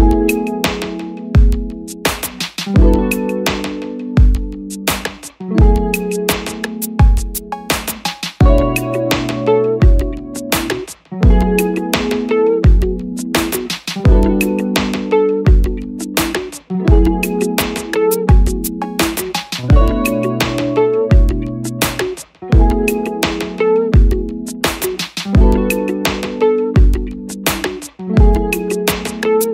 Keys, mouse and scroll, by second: 12.5 click, 19.4 double click.